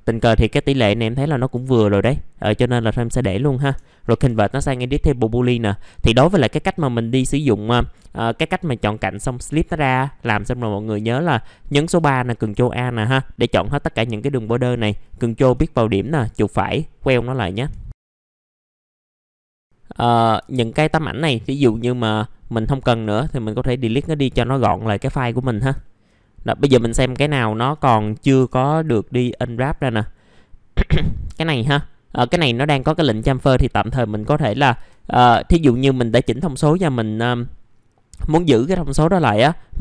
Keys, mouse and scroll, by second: 0.8-1.5 scroll up 1, 1.6 alt+middle click, 2.5 scroll down 1, 3.2 middle click, 5.9 middle click, 15.0 ctrl+click, 15.8 right click, 17.0 click, 17.9 F4, 18.2 scroll down 1, 18.5 right click, 19.1-19.6 scroll down 2, 19.2 alt+middle click, 19.3 click, 19.5 middle click, 19.6 click, 20.5 ctrl+click, 21.0-21.5 scroll up 1, 21.5 middle click, 23.1 middle click, 23.4-24.1 scroll up 1, 24.1 click, 24.6 alt+middle click, 25.4 middle click, 25.8 alt+middle click, 26.2-26.6 scroll up 1, 27.3 alt+middle click, 27.8 middle click, 28.4 F4, 29.3 alt+middle click, 33.2 right click, 33.8 click, 35.3 right click.